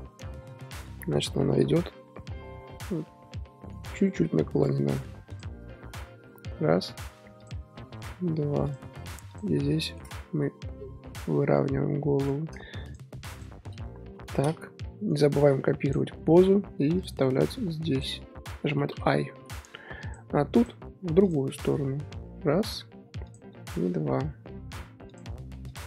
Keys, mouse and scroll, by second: 2.6 r, 4.0 scroll up 3, 4.6 r, 7.4 drag, 7.8 r, 9.3 click, 9.8-10.2 shift+middle drag, 10.2 r, 12.8 shift+click, 13.3 shift+click, 14.6 a, 15.1-17.0 right drag, 17.0-18.0 drag, 17.4-18.9 right drag, 20.0 click, 21.2 click, 21.8 r, 23.2 click, 23.7 r, 25.6 click.